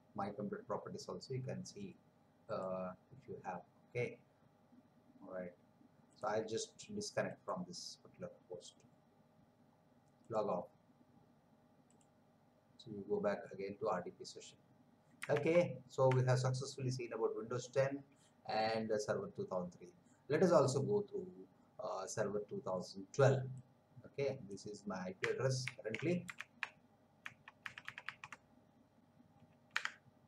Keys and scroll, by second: 15.5 alt+Tab, 25.6 ctrl+c, 26.6 alt+Tab, 29.7 BackSpace.